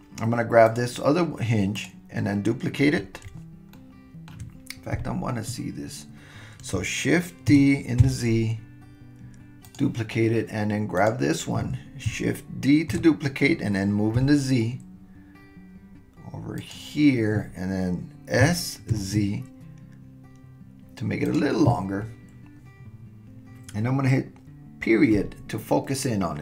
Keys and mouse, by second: 1.7 click, 3.7-5.6 shift+middle drag, 4.9 KP_1, 7.5 shift+d, 11.0 click, 12.9 shift+d, 18.4 s, 25.1 KP_Decimal.